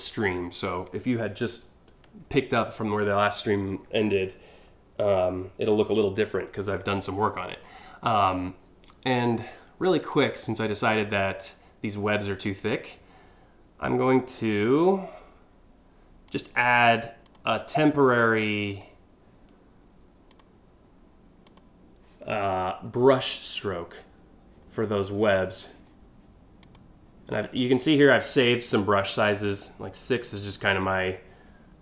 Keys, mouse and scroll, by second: 5.9-6.8 scroll up 3, 6.8-7.4 scroll down 3, 9.7 click, 12.1 click, 14.1 click, 15.9 click, 16.9 click, 18.3 click, 19.9 click, 21.1 click, 22.8 click, 26.2 click, 28.8 click.